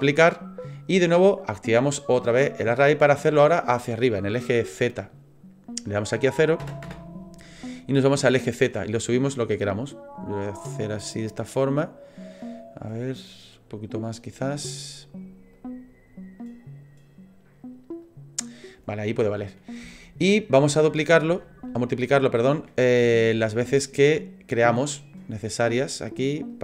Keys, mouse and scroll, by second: 0.1 click, 5.9 click, 10.9 middle click, 13.3 click, 19.4-19.9 scroll down 4, 19.9 shift+middle click, 20.8 scroll down 1, 21.4 shift+middle click, 22.7 scroll down 1, 23.2 shift+middle click, 24.8-26.6 click, 26.5 click.